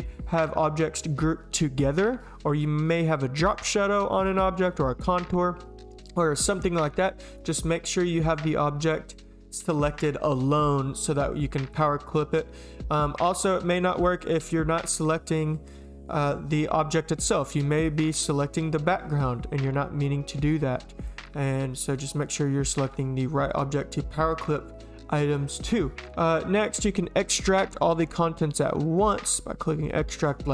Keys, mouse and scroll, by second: 11.7 click, 13.1 click, 14.2 click, 14.7 click, 17.4 click, 20.3 click, 21.0 click, 22.1 click, 22.7 click, 29.0 click, 29.8 click.